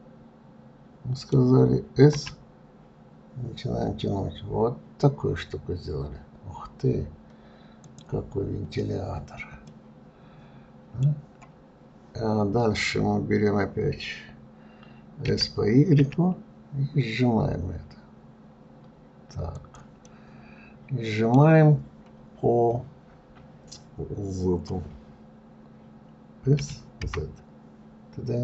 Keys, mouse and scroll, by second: 2.4 s, 9.4-9.9 scroll down 4, 9.9-12.9 middle drag, 20.3-22.0 middle drag, 22.0-22.9 scroll up 1.